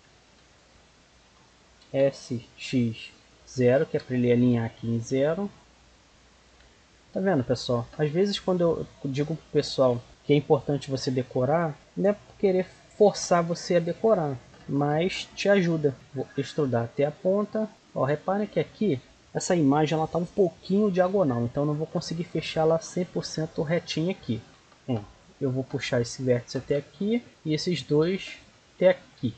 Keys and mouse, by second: 0.0 b, 1.8 s, 4.9 click, 5.7-9.5 middle drag, 9.5 click, 10.1-13.0 right drag, 15.9-17.4 drag, 15.9 e, 21.3-23.9 middle drag, 23.9-26.0 right drag, 24.5 g, 27.1-28.7 right drag, 27.3-28.9 drag, 28.9 right click.